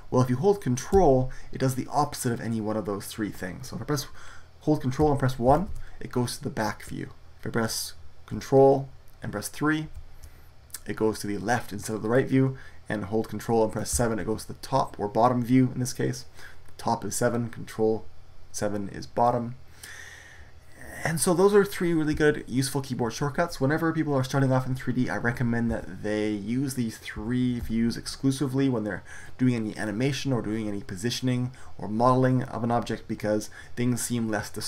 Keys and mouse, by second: 5.4 ctrl+KP_1, 9.7 ctrl+KP_3, 13.8 ctrl+KP_7, 25.6 KP_1, 27.1 KP_3, 27.5 KP_7.